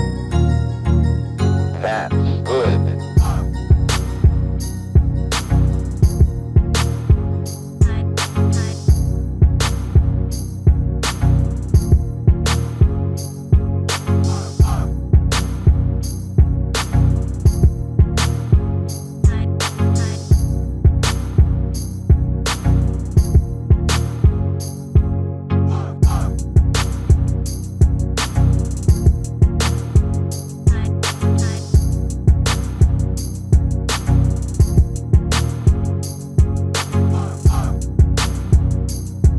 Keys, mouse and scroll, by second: 0.3-2.6 middle drag, 0.3-0.8 scroll down 1, 3.4-5.2 drag, 5.6-8.3 middle drag, 8.3-10.0 drag, 9.7 KP_1, 12.8-14.4 drag, 15.7-20.4 middle drag, 19.9-21.6 drag, 22.3-24.4 middle drag, 26.3-27.8 right drag, 27.6-29.3 drag, 29.4 click, 30.2-35.0 middle drag, 35.4 KP_3, 38.0-39.3 middle drag.